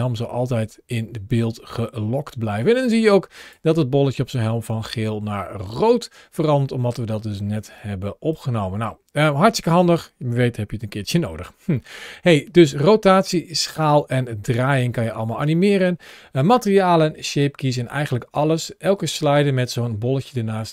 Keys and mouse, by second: 2.3 space, 2.7 click, 4.6 space, 7.6-8.2 drag, 9.5 click, 10.6 n, 11.7-14.9 middle drag.